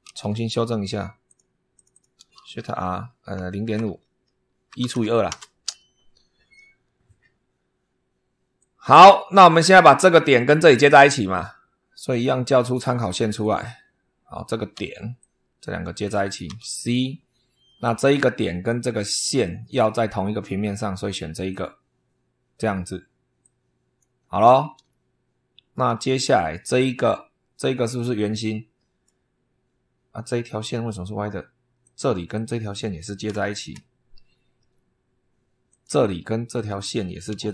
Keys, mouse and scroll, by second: 1.1 click, 1.6 click, 2.3 shift+r, 3.5-5.3 typing, 8.4 click, 12.5 click, 13.3 click, 14.6 Escape, 15.0 click, 16.4 c, 17.7 click, 19.2 click, 21.4 click, 23.3 click, 24.1 scroll down 2, 24.8-25.8 shift+middle drag, 25.9 shift+scroll down 1, 26.4 shift+click, 27.8-29.1 drag, 31.7 click, 32.2 click, 33.3 shift+o, 35.6 click, 36.4 click, 37.4 shift+o.